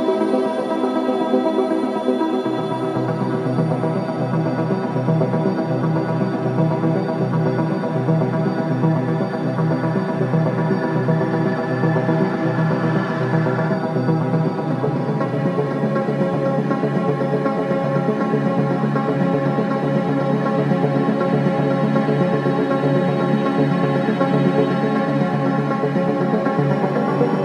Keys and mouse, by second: 0.0 click, 1.0 g, 1.4 x, 2.5 click, 4.4 Tab, 5.5 Right, 5.7 Right, 5.9 Right, 6.1 Right, 6.2 Right, 6.4 Right, 8.1 Right, 9.3 BackSpace, 9.7 Return, 11.5 Tab, 13.2-14.2 drag, 17.1-18.2 drag, 18.3 click, 20.3-21.3 drag, 21.7 g, 22.1 x, 23.7-25.4 drag.